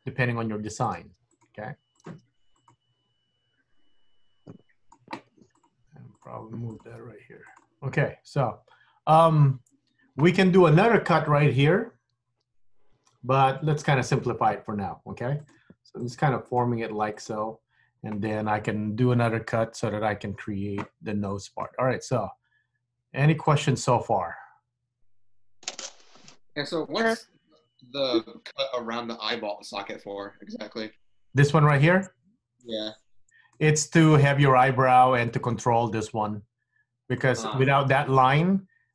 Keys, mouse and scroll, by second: 0.9 click, 1.1 g, 2.1 click, 2.2 g, 3.8 g, 5.6 click, 5.8 g, 6.8 click, 6.9 g, 8.2-8.8 scroll down 3, 8.8 scroll up 2, 8.9-10.6 scroll down 1, 15.5 click, 15.6 g, 16.6 click, 16.8 g, 21.2-21.6 scroll up 1, 21.8 middle click, 27.8-28.3 scroll up 1, 28.3-31.4 scroll down 1, 33.6 middle click, 35.4 middle click, 36.0-36.5 scroll up 1, 37.3 click, 38.4 shift+click.